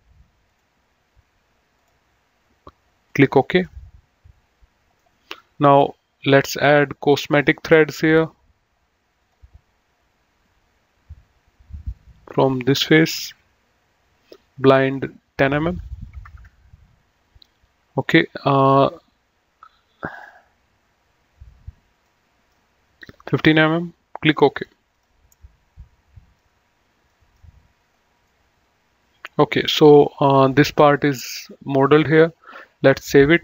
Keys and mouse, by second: 0.4 click, 1.7 click, 3.6 middle click, 7.2 click, 8.9 click, 12.5 click, 14.8 click, 16.1 KP_1, 16.3 KP_0, 18.0 click, 22.1 middle click, 24.5 click, 25.3 middle click, 27.1 middle click, 27.8 right click, 29.7 middle click, 32.7 click.